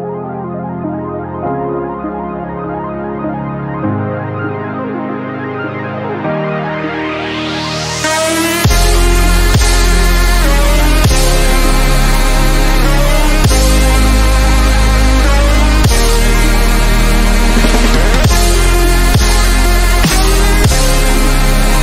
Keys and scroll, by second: 5.9 ctrl+t.